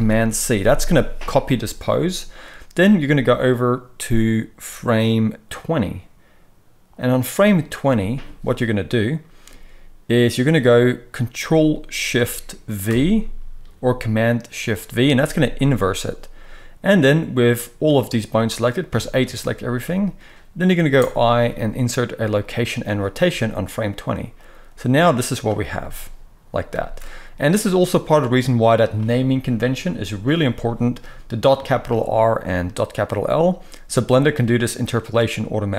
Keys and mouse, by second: 2.4-35.7 drag, 12.9 ctrl+shift+v, 18.9 a, 20.9 i, 25.7 space, 26.6 space.